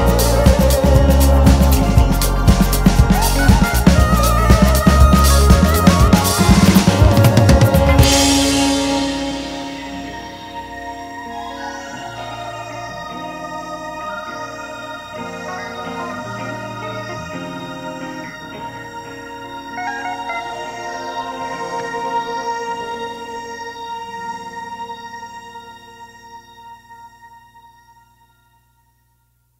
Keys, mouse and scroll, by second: 0.3 shift+click, 0.8 f, 1.0 `, 2.0 1, 2.3 click, 3.8-5.1 right drag, 3.8 e, 5.1-8.6 typing, 5.4 click, 5.8 shift+click, 6.2 click, 6.4 shift+click, 6.9 alt+a, 7.1 scroll down 1, 7.8-8.2 scroll up 1, 8.2 click, 9.6 scroll down 1, 9.8 `, 10.2 Tab, 10.5 scroll up 2, 10.6 `, 11.2-11.5 scroll up 1, 11.5 `, 13.8 scroll down 1, 14.1 `, 14.4 2, 14.9 scroll up 1, 15.6 click, 16.0 shift+click, 16.2 f, 16.4 Tab, 16.6-17.0 scroll down 1, 17.0 `, 18.1 `, 18.4 scroll up 1, 18.9-19.5 scroll up 2, 19.5 `, 24.3 click, 25.0 KP_7, 25.9 e, 28.2 e, 29.5 click.